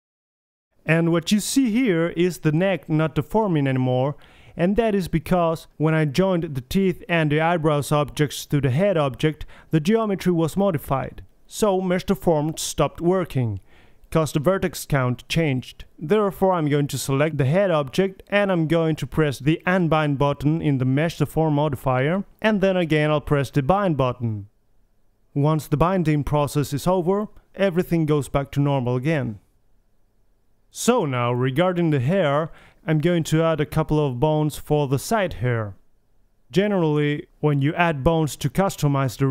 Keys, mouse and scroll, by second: 0.6 r, 0.8 right drag, 3.8-5.2 middle drag, 7.8 r, 15.8 alt+r, 17.3-19.8 drag, 19.8 middle click, 20.3-20.9 right drag, 20.9 middle click, 21.3-22.3 drag, 22.5 scroll up 1, 22.7-23.7 middle drag, 26.3 click, 28.2-28.7 right drag, 28.7-29.3 drag, 28.7 r, 29.3-30.6 middle drag, 32.1-32.7 right drag, 32.7-33.1 drag, 33.1-34.2 middle drag, 34.2-35.4 middle drag, 34.9 KP_3, 35.5-37.3 middle drag, 37.3 right click, 37.6-38.1 drag, 37.8 r, 38.1 middle drag, 39.0-39.3 right drag.